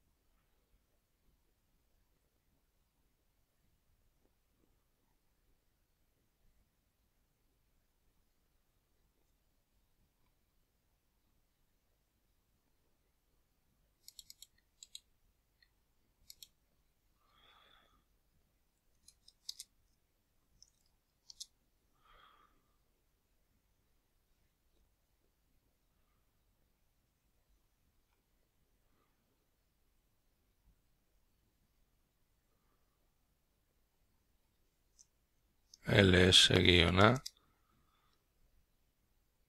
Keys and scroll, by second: 8.9-11.3 typing, 25.4-27.2 typing.